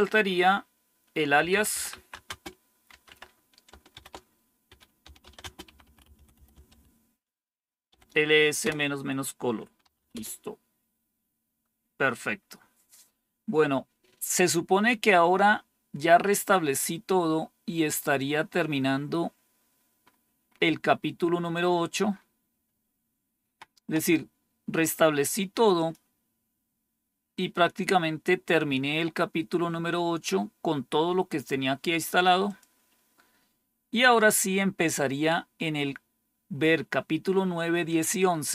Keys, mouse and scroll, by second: 1.0-7.8 typing, 8.5 Return, 9.5-11.2 typing, 17.8 click, 19.4-21.4 scroll down 8, 22.0 scroll down 2, 22.5-23.3 scroll down 2, 23.3 scroll down 1, 25.6 click, 32.3 click.